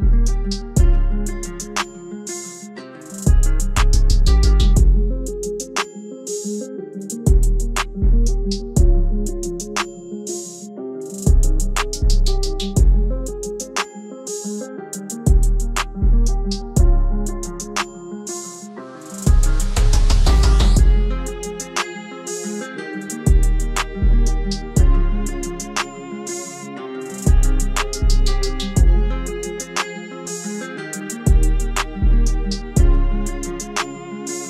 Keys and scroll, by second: 13.6 F4, 19.5 alt+w.